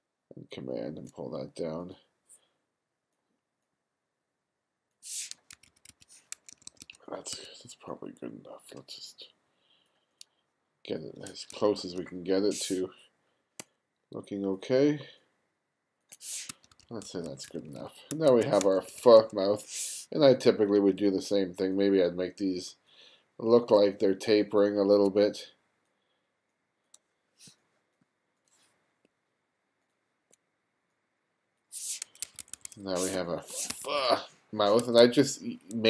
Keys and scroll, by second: 5.2 1, 6.2 2, 7.0 1, 11.2 2, 16.2 1, 18.3 2, 27.2 space, 31.9 1, 32.8 space, 33.4 1, 34.7 2.